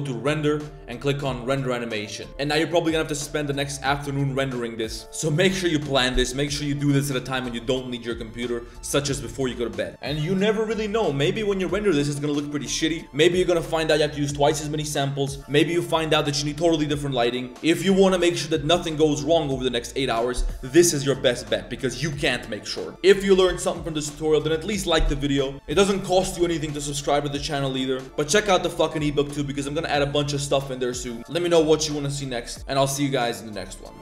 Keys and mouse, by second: 2.2 click, 2.7 middle drag, 3.0-3.4 middle drag, 3.6-4.0 middle drag, 28.0-29.4 middle drag.